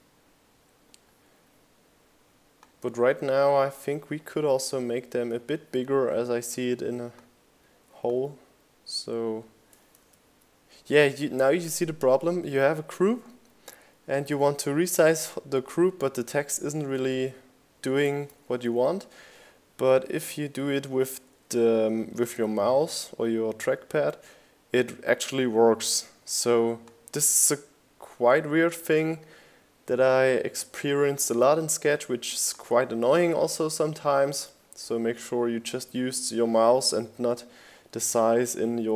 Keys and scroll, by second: 1.7 super+z, 9.9 super+z, 36.7 Right.